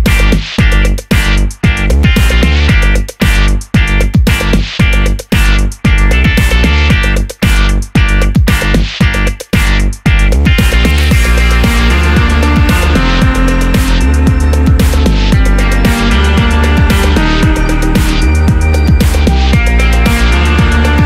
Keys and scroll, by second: 0.1 super+d, 6.3 Down, 6.4 Down, 18.0 super+a.